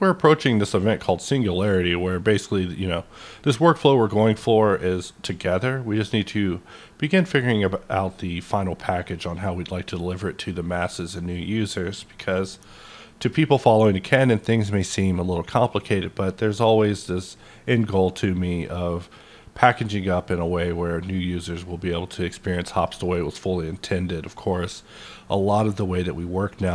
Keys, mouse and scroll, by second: 1.5-2.2 scroll down 1, 2.2 scroll down 1, 2.5-3.0 scroll up 1, 3.0-3.9 scroll up 1, 3.9-4.9 scroll up 1, 4.9-5.6 scroll up 1, 5.8-6.4 scroll up 1, 7.5-8.2 scroll up 1, 8.5 scroll up 1, 9.8-10.5 scroll up 1, 10.5-12.0 scroll up 1, 12.7 scroll up 1, 15.9-17.5 scroll up 1, 18.8-20.0 scroll up 1, 22.7 click, 22.7 scroll up 1, 23.1-26.7 middle drag.